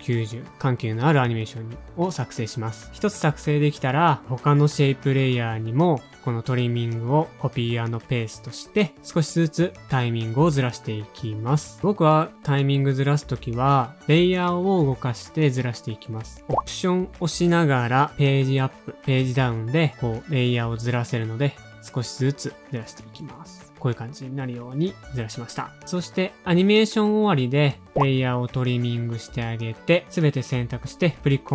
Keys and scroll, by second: 0.0-1.4 typing, 1.5 Tab, 1.5 shift+super+k, 5.6-6.3 typing, 7.0 super+c, 8.1 super+a, 8.3 super+z, 9.8 super+v, 10.3 space, 11.5 alt+/, 11.5 shift+super+a, 11.5 u, 11.7 alt+Page_Down, 12.0 alt+Page_Down, 12.2 alt+Page_Down, 13.3 super+Up, 13.7 alt+Page_Down, 14.5 super+Up, 14.9 alt+Page_Down, 15.2 alt+Page_Down, 15.8 super+Up, 16.7 super+Up, 17.0 alt+Page_Down, 17.1 alt+Page_Down, 17.3 alt+Page_Down, 17.7 super+Up, 18.3 super+Up, 18.6 alt+Page_Down, 19.2 super+Up, 19.7 alt+Page_Down, 20.0 alt+Page_Down, 20.5 super+Up, 20.8 alt+Page_Down, 21.2 super+Up, 21.5 alt+Page_Down, 21.8 alt+Page_Down, 22.7 super+Up, 23.0 alt+Page_Down, 23.5 0, 24.7 space, 25.0 0, 26.1 space, 27.5 Page_Up, 28.6 shift+super+Down, 28.7 shift+super+Down, 29.0 shift+super+Down, 30.5 alt+].